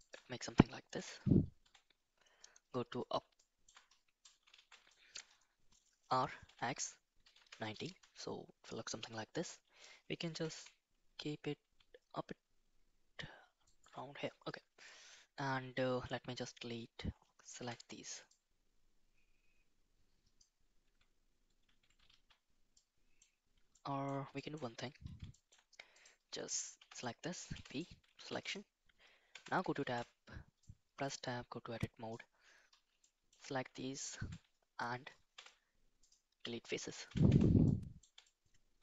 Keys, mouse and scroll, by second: 0.9 KP_4, 1.6 KP_7, 3.3 shift+middle click, 4.5 shift+z, 4.9 middle click, 6.0 r, 10.3 g, 17.5 3, 18.3-20.5 drag, 22.1 shift+z, 22.7 middle click, 23.7 shift+middle click, 24.3 shift+middle click, 25.3 shift+middle click, 25.9 click, 26.7 l, 27.5 p, 28.1 Tab, 29.3 Tab, 29.4 KP_7, 29.8 shift+z, 30.7-32.0 drag, 33.0 shift+middle click, 35.3 x, 36.9 shift+z, 37.2 Tab, 37.6-38.0 middle drag, 38.2-38.8 shift+middle drag.